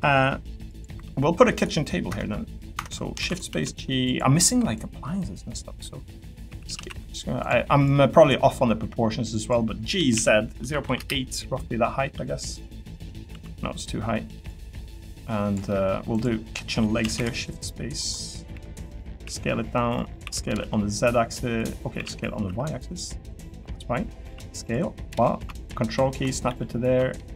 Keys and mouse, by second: 0.9 3, 2.7 Escape, 3.2 shift+d, 3.5 s, 4.7 click, 6.8 y, 7.8 click, 9.9-10.8 typing, 11.0 Return, 12.1 e, 12.5 click, 12.9 click, 13.3 l, 15.1 click, 15.7 middle click, 16.1 click, 17.0 shift+d, 19.2 s, 20.2 s, 20.6 z, 21.9 s, 22.4 y, 23.3 click, 23.5 middle click, 24.2 s, 24.6 click, 25.2 click, 26.5 e.